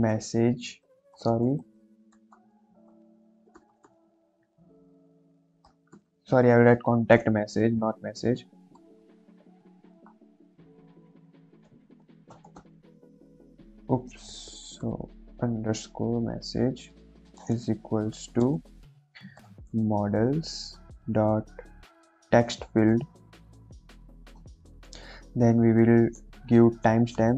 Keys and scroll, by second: 0.0-0.7 typing, 2.0-3.3 typing, 5.4 c, 5.7 o, 5.8 BackSpace, 8.5-12.5 typing, 13.1 Left, 13.6 Left, 13.6 Left, 14.7 BackSpace, 15.3 shift+-, 16.0 Right, 16.8 End, 17.3-19.6 typing, 20.7 l, 20.8 s, 20.9 ., 22.8 Down, 22.8 Return, 23.3 shift+9, 23.4 shift+0, 24.2 Return, 27.1-27.3 typing.